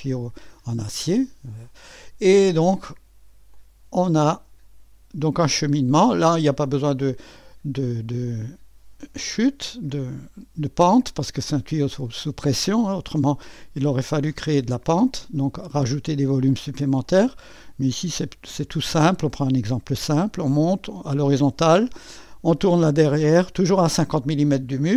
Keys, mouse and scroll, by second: 2.3 click, 3.6-4.6 drag, 6.3 click, 6.7 click, 8.2 click, 10.1 click, 12.1-13.2 drag, 13.6-14.8 drag, 17.1-18.1 drag, 21.7 click, 23.3 click, 24.8-24.9 drag.